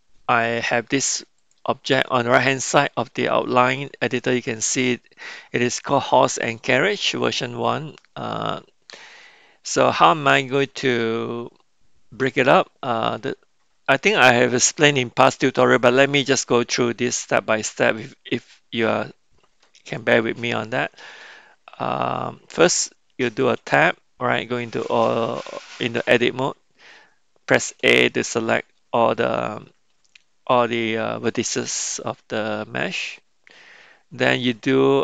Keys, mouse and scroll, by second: 1.4 click, 9.2 middle click, 12.5 middle click, 20.0-21.2 middle drag, 23.8 Tab, 27.7 a, 34.3-35.0 drag.